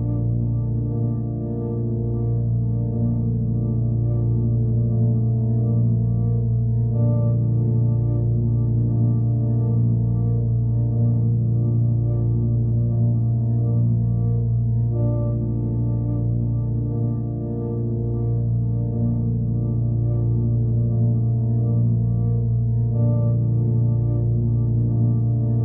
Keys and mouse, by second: 0.6-2.0 drag, 2.6-4.1 drag, 10.7 click, 12.5 click, 13.9-14.3 alt+middle drag, 16.1 ctrl+s, 18.1 click, 20.2 click, 22.8-24.8 drag.